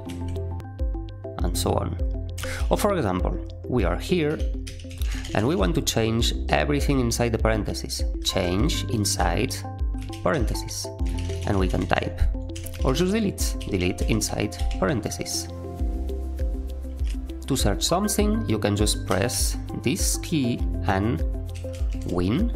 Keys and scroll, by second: 0.0-0.5 typing, 2.3 Escape, 2.5-5.9 typing, 7.9-15.0 typing, 12.5 Escape, 17.1 ctrl+alt+a, 19.0 /, 21.2-22.3 typing.